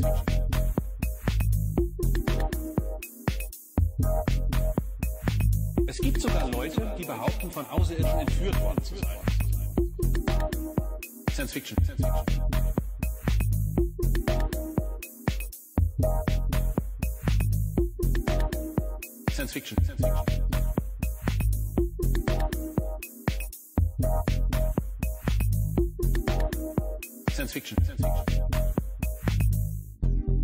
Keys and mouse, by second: 0.1-3.1 drag, 4.0-7.4 drag, 8.4 middle click, 12.8 shift+a, 19.1 middle click, 21.5-22.8 drag, 25.4 middle click, 26.5 click, 27.5 click, 28.5 middle click, 30.2 click.